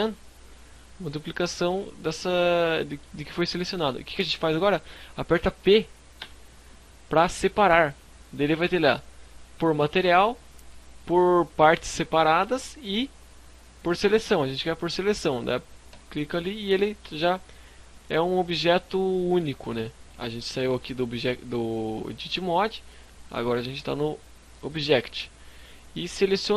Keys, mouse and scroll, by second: 0.7 right click, 1.3 scroll up 1, 1.4 middle click, 2.4 middle click, 5.2 p, 15.7-16.2 scroll down 5, 16.2 Tab, 16.7 scroll up 3, 16.9 middle click, 18.9-19.4 scroll down 4, 19.4 middle click, 21.0 click, 22.8 scroll up 4, 23.5 middle click, 24.9 right click, 25.9 right click.